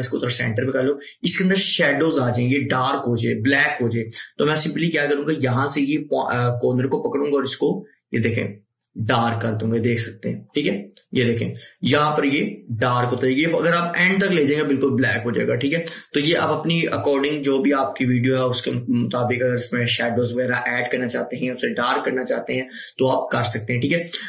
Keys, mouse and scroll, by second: 5.7-15.8 drag.